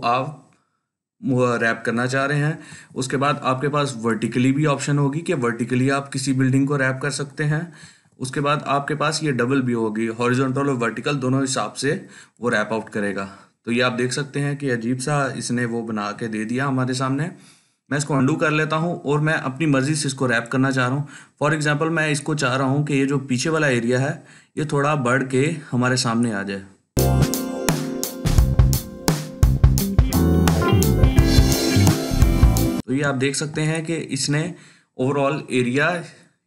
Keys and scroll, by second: 2.6 ctrl+z, 7.7 ctrl+z, 15.7 ctrl+z.